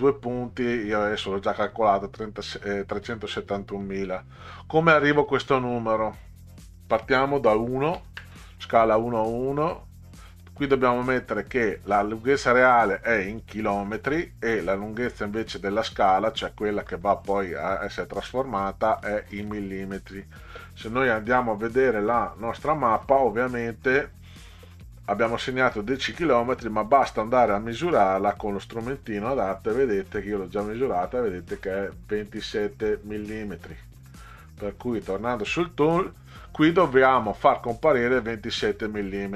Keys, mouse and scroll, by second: 6.4 click, 7.9 1, 8.1 KP_Enter, 10.4 click, 11.1 click, 13.4 click, 14.0 click, 19.0 click, 19.4 click, 22.3 click, 23.6-24.0 middle drag, 28.4 click, 35.0 click, 36.7 click.